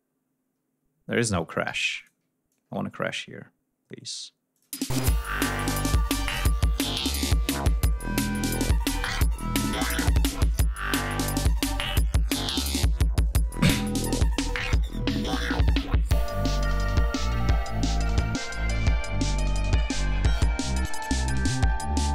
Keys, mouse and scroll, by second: 1.6 g, 1.9 ctrl+click, 2.4-4.2 ctrl+drag, 4.5 click, 4.6 space, 4.9 ctrl+scroll up 2, 5.8 ctrl+scroll down 2, 7.1 ctrl+scroll down 2, 7.9 ctrl+scroll up 2, 10.3-11.1 ctrl+scroll up 3, 12.0 scroll down 2, 13.2 ctrl+scroll up 2, 13.9 d, 15.0 ctrl+scroll down 2, 16.2 ctrl+scroll down 2, 18.2 ctrl+scroll up 2.